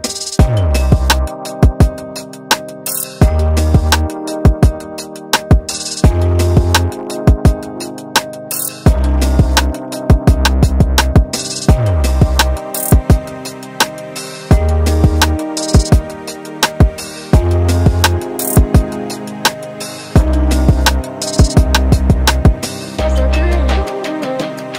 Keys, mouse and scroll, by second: 3.1 Tab, 3.4 middle click, 5.9 scroll up 1, 6.1 middle click, 6.5 click, 7.1 alt+click, 7.8 middle click, 9.6 alt+click, 10.3 ctrl+click, 10.8 middle click, 11.8 ctrl+click, 12.6 shift+click, 13.1 middle click, 13.6 scroll down 1, 13.8 middle click, 15.6 e, 20.7 KP_7, 21.3 shift+z, 21.5-22.3 scroll up 1, 22.3-22.8 scroll up 2, 23.5 ctrl+z, 23.7 ctrl+z, 23.8 ctrl+z, 24.4 ctrl+z, 24.7 ctrl+z.